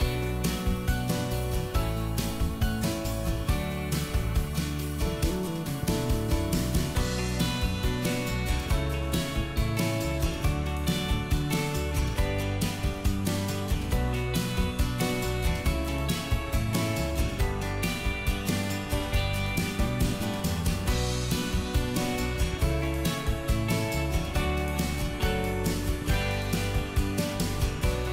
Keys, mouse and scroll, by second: 0.6 q, 1.1 click, 4.1 KP_4, 4.2 KP_5, 5.9 KP_7, 6.9 middle click, 8.0 click, 8.4 middle click, 8.9 s, 9.7 ctrl+click, 10.9 Escape, 11.3 click, 12.1 middle click, 12.6 click, 14.5 ctrl+click, 16.2 ctrl+click, 16.6 middle click, 17.1 scroll down 1, 17.5 middle click, 18.0 s, 19.0 click, 21.0-23.1 middle drag, 23.4 click, 23.8 middle click, 24.8 q, 25.5-27.8 drag.